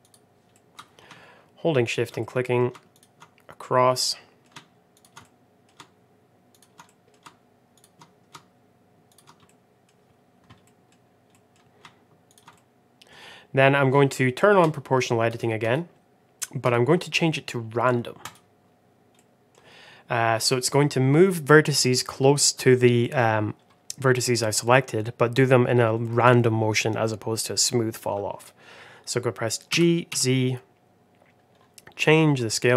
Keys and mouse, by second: 0.4 middle click, 1.7 shift+click, 2.1 middle click, 2.8 shift+click, 3.9 middle click, 5.1 middle click, 6.4 shift+click, 6.7 middle click, 7.6 shift+click, 9.4 middle click, 10.5 middle click, 11.2 middle click, 12.2 shift+click, 12.4 middle click, 14.5 click, 15.5 click, 16.6-18.7 drag, 19.1 middle click, 22.9 middle click, 24.1 middle click, 25.9 middle click, 29.6 g.